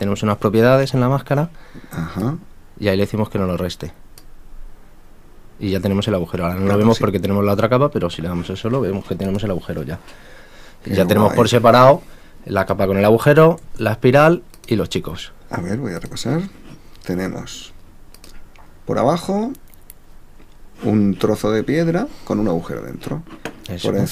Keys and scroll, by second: 13.6 super+a.